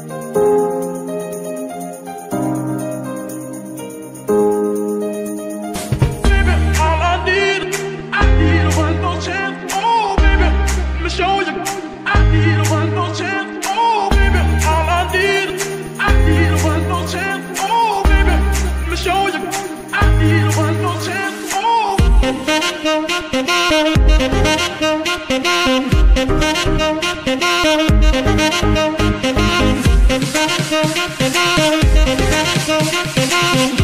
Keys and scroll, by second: 0.5 g, 2.5 KP_7, 5.0 x, 12.8 BackSpace, 12.9 BackSpace, 13.1 BackSpace, 14.0 b, 14.4 Return, 17.9 f, 17.9 r, 18.3 Return, 27.8 Escape, 32.8 ctrl+c.